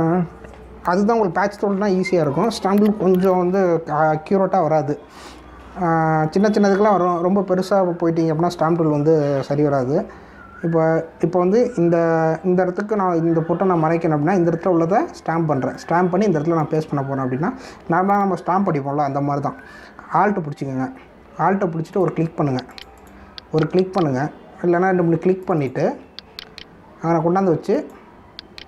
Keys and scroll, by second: 11.4 ].